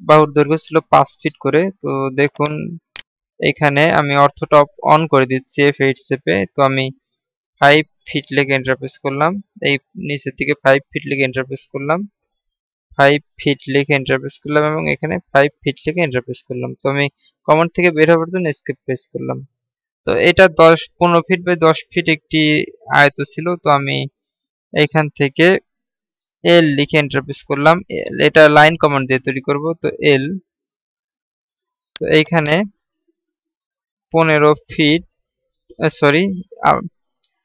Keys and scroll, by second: 18.6 Escape, 34.7 typing.